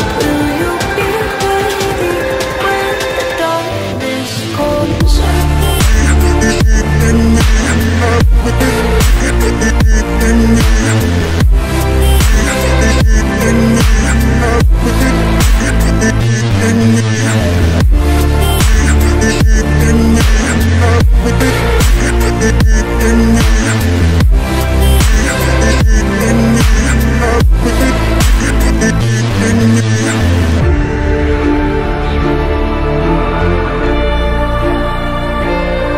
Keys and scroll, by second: 14.3 shift+F2, 15.0 Escape.